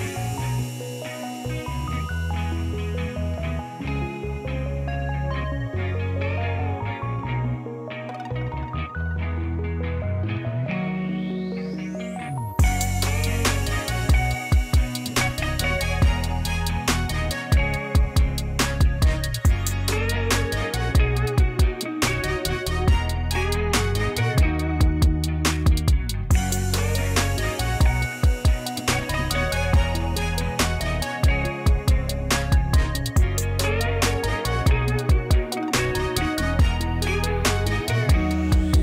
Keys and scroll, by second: 1.4-2.2 typing, 2.4 Return, 6.4 e, 11.8 f, 17.5-18.7 typing, 19.5 Return, 26.4-27.7 typing.